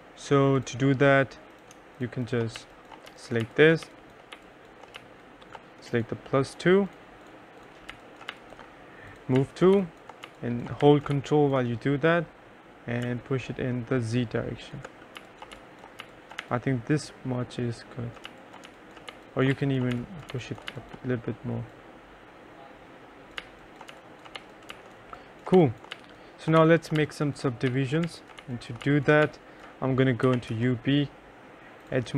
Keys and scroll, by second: 2.4-5.1 typing, 8.0 3, 8.4 2, 9.8 1, 10.3 2, 10.9 3, 11.2 1, 15.0-17.0 typing, 18.1-21.2 typing, 23.2-31.1 typing.